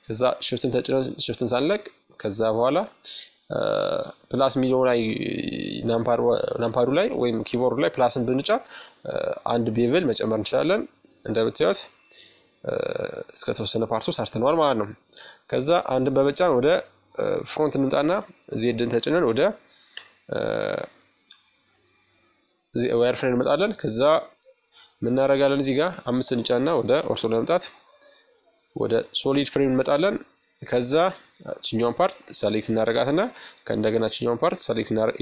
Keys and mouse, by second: 4.9-8.0 middle drag, 8.3 middle click, 9.5 Tab, 10.8-12.6 middle drag, 13.4 KP_1, 15.8 z, 16.1 middle click, 17.1-19.3 middle drag, 19.4-22.4 drag, 22.4-24.2 middle drag, 23.3 KP_5, 26.4-28.2 drag, 28.2-29.7 middle drag, 29.7-31.6 right drag, 31.6 middle click, 32.1-33.9 right drag, 33.3 ctrl+z, 34.7-35.2 right drag.